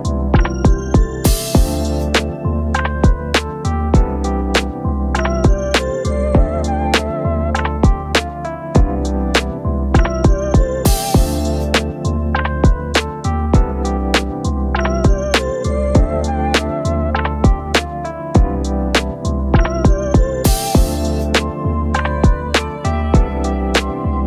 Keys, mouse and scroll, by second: 9.6 double click, 9.8 double click, 11.5-15.8 typing, 20.3 double click, 21.1-22.0 typing.